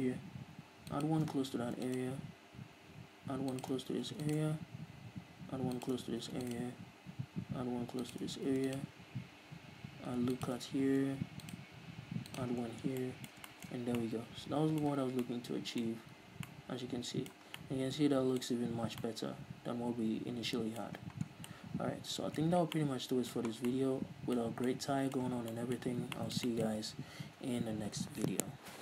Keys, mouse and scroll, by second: 1.5 shift+click, 2.0 ctrl+r, 4.1 shift+click, 4.5 ctrl+r, 6.3 shift+click, 6.6 ctrl+r, 8.5 shift+click, 8.9 ctrl+r, 10.9 shift+click, 11.3 ctrl+r, 12.9 shift+click, 13.0-13.4 scroll down 2, 13.1 Tab, 13.4-28.8 middle drag, 14.3 a, 15.5 a, 16.4 a, 16.8 scroll down 2, 17.9 scroll down 2, 18.9-19.4 scroll up 2, 21.3 scroll up 1, 21.4 scroll down 1, 22.8 scroll up 1, 23.0 scroll down 1, 23.9 scroll down 1, 24.8 scroll up 1, 25.7 scroll down 2, 26.2-26.6 scroll up 2, 27.3 ctrl+s.